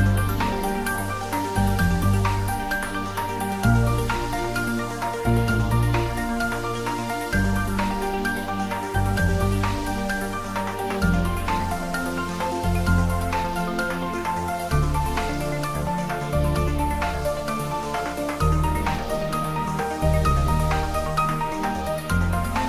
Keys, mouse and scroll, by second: 4.6-6.0 scroll up 2, 6.0-6.6 scroll up 1, 7.6 alt+shift+click, 7.7-9.8 alt+shift+right drag, 11.8 alt+shift+click, 12.7-13.8 alt+shift+right drag, 14.0-16.0 shift+drag, 16.7 alt+shift+Num_Lock, 16.9 shift+click, 19.4-20.7 scroll down 1.